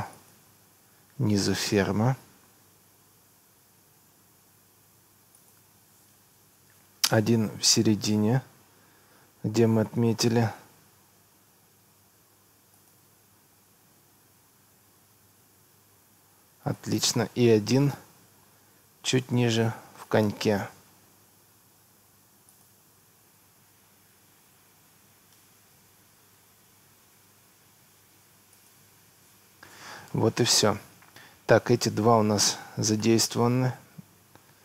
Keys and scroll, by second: 6.0 Escape, 17.2 Escape, 29.2 Escape.